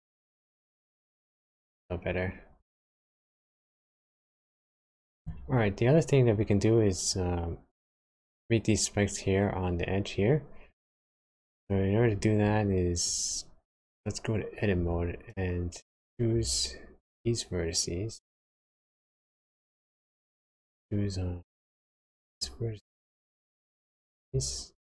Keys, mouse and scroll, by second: 0.4 space, 3.1 space, 4.3 middle click, 11.2 click, 13.5-14.0 scroll up 2, 14.0 scroll down 2, 14.8 Tab, 15.7-16.2 scroll up 2, 16.2 scroll down 1, 18.1-18.6 scroll up 1, 18.6 shift+scroll down 1, 18.7 shift+middle click, 22.1 alt+click, 23.5 alt+shift+click.